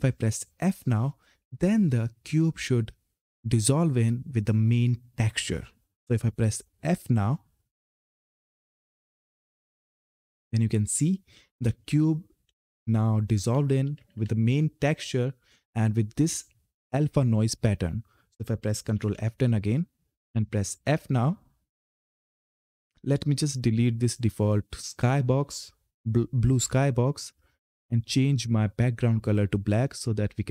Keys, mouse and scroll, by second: 7.2 f, 10.8-14.4 typing, 18.4 typing, 18.7 ctrl+F10, 19.9 f, 24.6 click, 27.9 click.